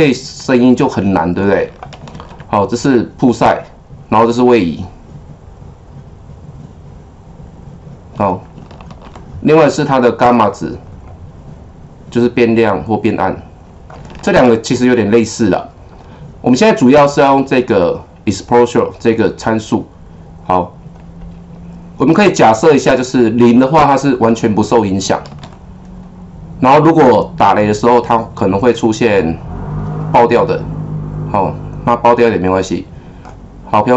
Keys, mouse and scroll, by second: 2.1 ctrl+z, 4.5-8.9 drag, 8.9 ctrl+z, 11.0-14.3 drag, 14.3 ctrl+z, 22.7-25.3 drag, 25.3 ctrl+z, 26.9-33.8 drag.